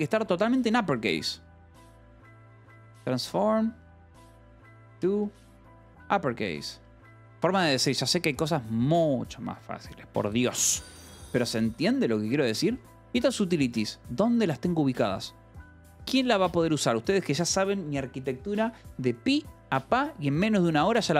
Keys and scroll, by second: 0.0-6.6 typing, 7.0 Escape, 12.2 shift+v, 12.4 Escape, 12.7 k, 13.4 j, 16.4 Escape.